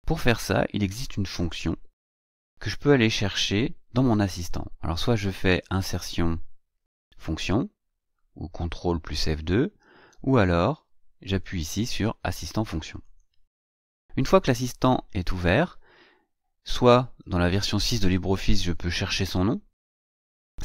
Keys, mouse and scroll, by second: 5.4 click, 10.3 click, 13.0 click, 14.4-15.6 drag.